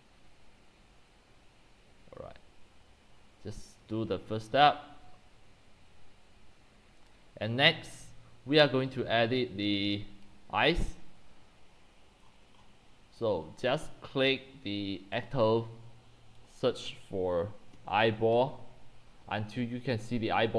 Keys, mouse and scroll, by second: 7.1-9.0 drag, 8.7-11.0 typing, 12.2 middle click, 12.2 scroll down 8, 12.6 click, 12.6-14.6 scroll up 13, 14.6-15.2 scroll up 1, 15.2 scroll down 10, 15.3-17.7 drag, 17.4-19.0 typing.